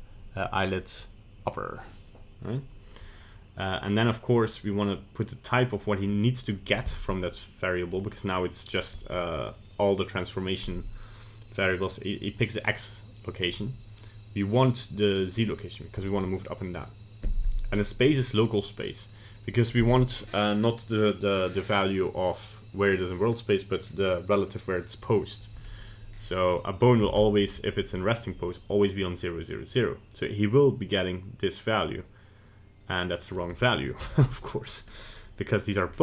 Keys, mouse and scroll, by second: 26.6 right click, 27.1 ctrl+Tab, 27.4 right click, 31.0 click, 34.2 ctrl+z, 34.5 middle click, 34.9 middle click.